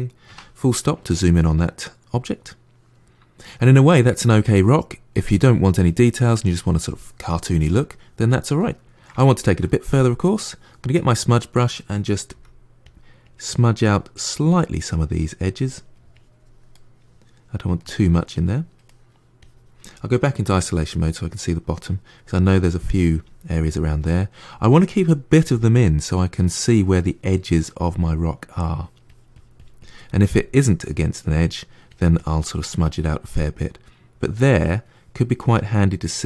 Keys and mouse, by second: 0.1 KP_Decimal, 0.7-8.4 middle drag, 8.7-10.8 shift+middle drag, 10.8 click, 11.2 middle click, 12.2 f, 13.1-14.5 drag, 14.5 middle click, 15.1 click, 15.6 middle click, 16.0 click, 16.6-18.2 middle drag, 18.2 click, 18.7 middle click, 19.3-20.3 drag, 20.3 KP_Divide, 20.7 middle click, 21.6-24.0 drag, 24.0 middle click, 24.4 click, 24.9 middle click, 25.4 click, 25.9-28.6 middle drag, 28.6-30.0 drag, 30.0-31.8 middle drag, 31.8 click, 32.7-36.2 middle drag.